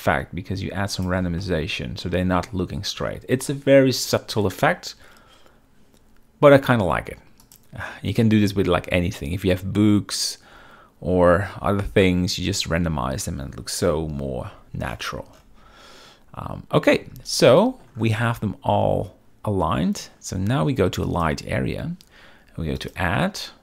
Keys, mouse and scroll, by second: 1.5-2.1 middle drag, 7.5 click, 14.0 KP_7, 14.6 z, 17.6 shift+middle drag, 21.2 click, 22.9-23.6 drag.